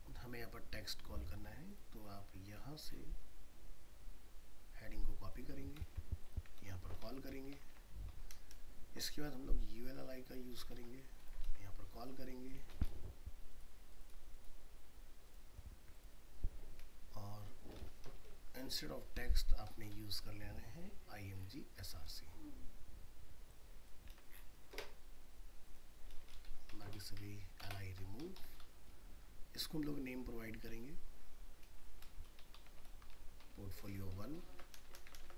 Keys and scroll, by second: 5.8 ctrl+c, 6.6 ctrl+v, 10.8 ctrl+c, 11.4 ctrl+v, 24.1 ctrl+c, 26.1 ctrl+v, 34.4 ctrl+Home, 34.5 ctrl+c, 34.8 ctrl+Return, 34.8 ctrl+v.